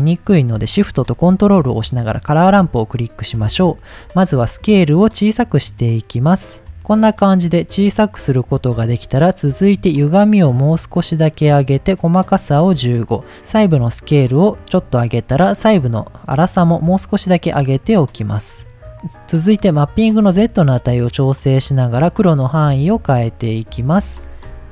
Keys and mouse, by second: 3.9-6.7 drag, 6.7 ctrl+z, 7.1-8.5 middle drag, 9.9-11.4 drag, 11.8 click, 12.8-14.8 drag, 15.2-18.1 drag.